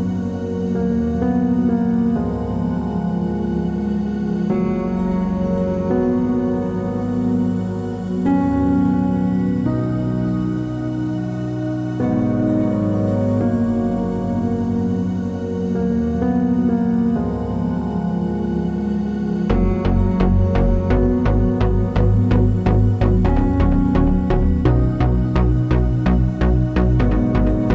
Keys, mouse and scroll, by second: 0.6 p, 0.8 Tab, 1.1-1.6 drag, 1.6 h, 1.8-2.2 drag, 2.2 Tab, 2.8 alt+click, 3.6 x, 3.8 middle click, 4.3 click, 4.6 2, 4.7 click, 4.9 shift+click, 5.0 middle click, 5.3 click, 5.5 shift+click, 5.7 f, 5.8 click, 5.9 shift+click, 6.0 f, 6.1-7.4 middle drag, 6.2 Tab, 6.7 alt+h, 7.0 Tab, 7.4 click, 7.7 Tab, 7.7 middle click, 8.0 click, 8.1 shift+click, 8.3 3, 8.4 click, 8.5 shift+click, 8.8 e, 10.0 ctrl+z, 10.2-12.5 middle drag, 11.1 ctrl+r, 12.1 Escape, 12.1-12.5 drag, 12.6-13.6 middle drag, 13.1 g, 13.6 click, 13.8 3, 14.0 click, 14.1 shift+click, 14.3 a, 15.0-17.2 middle drag, 16.7 e, 17.2 click, 17.3 middle click, 17.8 2, 17.8 click, 18.2-19.3 shift+middle drag, 18.5 scroll up 2, 18.7 g, 19.3 click, 19.3 middle click, 19.7 click, 20.1 shift+click, 20.4 g, 21.1 click, 21.2-22.8 middle drag, 21.4-22.4 scroll down 2, 22.6 scroll up 2, 22.7 3, 22.8 click, 22.9 shift+click, 23.5 click, 24.1 shift+click, 24.9 Escape, 25.0 ctrl+z, 25.5 shift+click, 26.2 click, 26.8 e, 26.8 click.